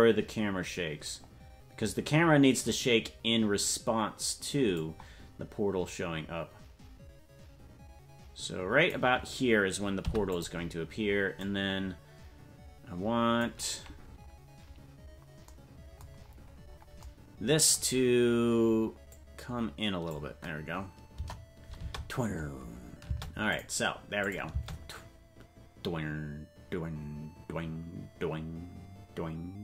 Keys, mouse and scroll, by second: 5.9-9.0 drag, 10.0 i, 11.4-13.5 drag, 16.1-17.0 scroll down 14, 19.1-20.2 drag, 21.1 KP_0, 21.8 space, 23.5 space, 23.5 click, 24.2 click, 24.5 space.